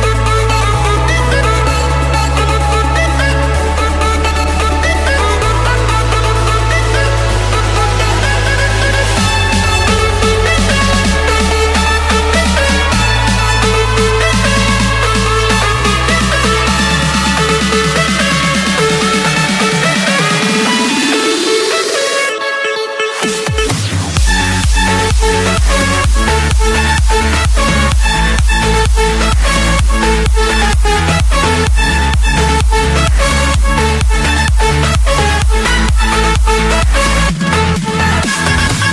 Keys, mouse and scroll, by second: 1.0 click, 2.7 click, 4.2 click, 5.0 click, 5.7 click, 6.6 click, 7.0-8.1 scroll, 8.7 click, 9.5 click, 9.7 Escape.